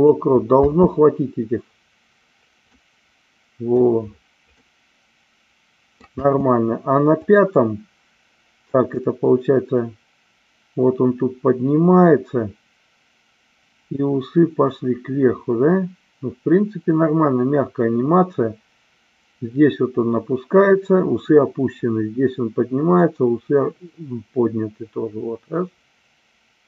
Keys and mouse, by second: 0.5 space, 2.8-3.8 middle drag, 4.7-6.1 middle drag, 6.2 space, 7.2 click, 9.0-26.6 drag.